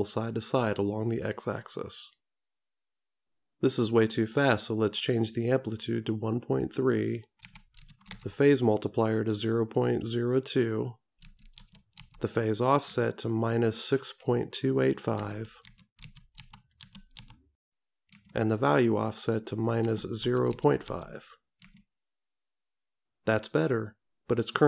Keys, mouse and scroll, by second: 5.3 click.